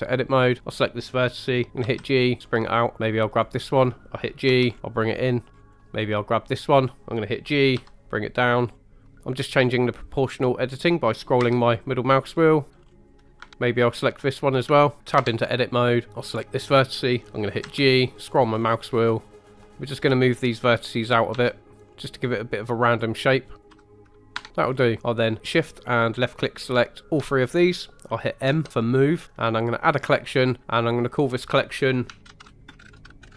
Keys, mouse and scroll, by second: 0.6 click, 1.8 g, 2.4-2.9 scroll up 3, 3.3 click, 4.5 g, 4.7-5.5 scroll up 2, 5.5 scroll down 1, 5.7 scroll down 1, 5.8 click, 5.8 middle click, 6.5 click, 7.7 g, 8.7 scroll down 1, 9.0 click, 11.4 g, 12.3-12.7 scroll down 2, 12.7-13.2 scroll up 5, 13.1 click, 13.2 middle click, 13.7 Tab, 13.7 click, 14.3 middle click, 14.8 shift+middle drag, 15.2 Tab, 16.1 click, 17.6 g, 18.5-19.2 scroll down 4, 19.4 click, 19.6 middle click, 20.7 click, 21.3 g, 21.8 scroll up 2, 22.2 click, 22.7 middle click, 23.5 click, 23.7 g, 24.0 scroll down 1, 24.3 middle click, 24.3 Tab, 24.6-25.0 scroll down 3, 25.0 shift+click, 26.2 shift+click, 27.0 shift+click, 28.5 m, 32.2 typing.